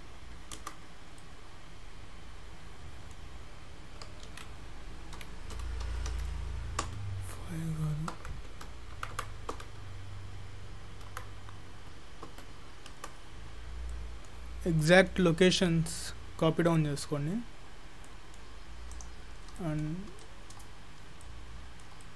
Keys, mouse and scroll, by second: 1.2 middle click, 4.3 ctrl+z, 5.2 g, 13.7-14.3 scroll down 3, 14.0 middle click, 14.4-14.8 scroll up 3, 14.8 middle click, 15.1-16.4 scroll down 1, 16.4-17.0 scroll down 4, 16.8 middle click, 17.1 scroll up 1, 17.3-18.1 scroll down 11, 18.1 middle click, 19.0 click, 19.3 scroll up 2, 19.6 shift+middle click, 20.0 scroll up 2, 20.2 shift+middle click, 20.7 scroll down 2, 21.2 shift+middle click, 21.8 shift+scroll down 1, 22.0 middle click.